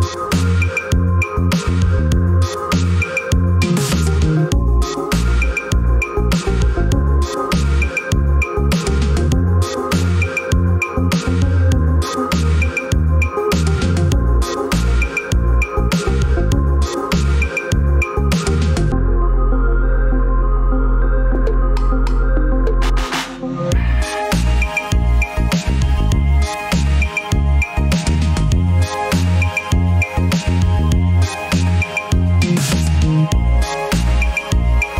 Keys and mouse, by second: 6.1 ctrl+r, 18.3-20.0 middle drag, 23.1-23.9 drag, 24.6 shift+click, 27.1 middle drag, 27.8 middle click, 29.0-29.8 middle drag, 32.0 `, 33.3 alt+z.